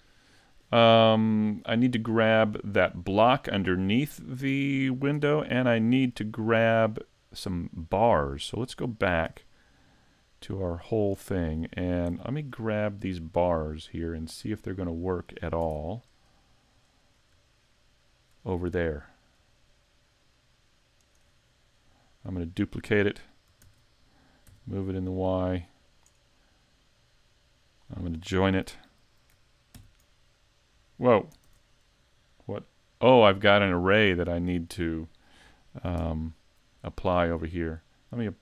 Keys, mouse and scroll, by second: 5.2 Tab, 6.0 Tab, 9.3 `, 9.6 scroll down 3, 10.1 middle click, 11.2 shift+middle click, 11.7-12.1 scroll up 3, 12.1 shift+middle click, 12.3 `, 12.7 middle click, 15.6 Tab, 16.1 right click, 17.1-17.5 scroll up 3, 17.5 shift+middle click, 18.5-18.8 scroll up 1, 19.2 scroll up 1, 20.3 shift+right click, 21.1 shift+right click, 21.5-22.1 scroll down 3, 21.9 middle click, 23.6 shift+d, 26.0 click, 26.9 click, 29.7 ctrl+j, 31.5 z, 33.2 middle click, 36.0 KP_Decimal, 36.9 middle click.